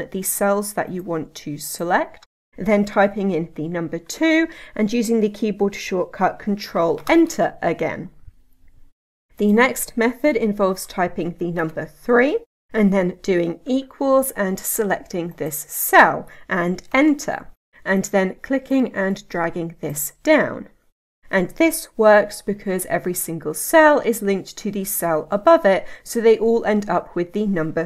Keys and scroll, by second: 7.0 ctrl+Return, 22.8 F2.